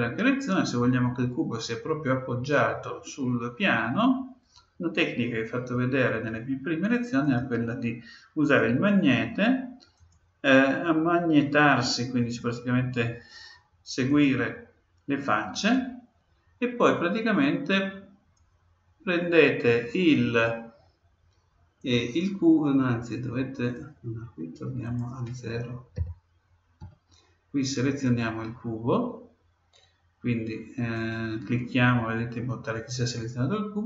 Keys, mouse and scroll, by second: 8.4-11.7 drag, 14.0-16.0 drag, 17.4-19.3 drag, 21.8-23.6 drag, 24.8-26.6 drag, 30.9-32.7 right drag.